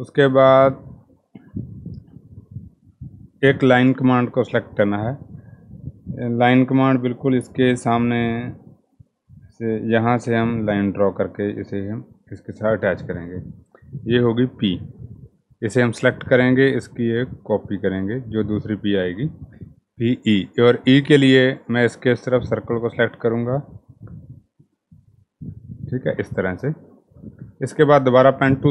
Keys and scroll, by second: 0.4-1.1 typing.